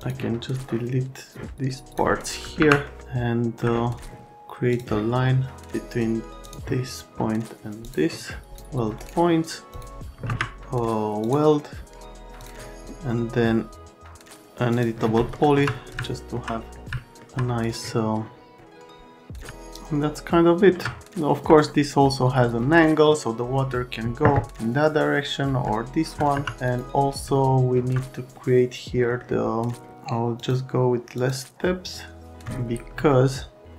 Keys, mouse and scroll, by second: 0.0 click, 1.5 click, 2.5 Delete, 2.9 middle click, 4.7 click, 6.4 click, 7.8 click, 8.5 click, 9.7 click, 10.3 ctrl+a, 11.2 click, 12.4 click, 14.7 click, 15.3 middle click, 15.5 F3, 18.6 click, 19.5 alt+middle click, 21.0 alt+middle click, 25.6 alt+middle click, 26.3 F3, 26.6 middle click, 27.3 alt+middle click, 28.3 middle click, 30.4 click, 31.1 click, 31.8 click, 33.1 alt+middle click.